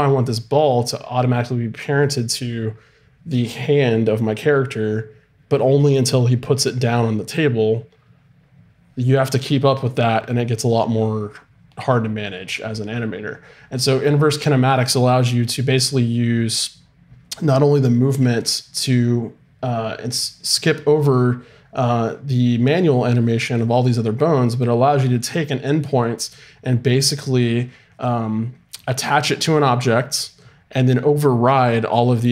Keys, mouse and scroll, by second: 18.1 g.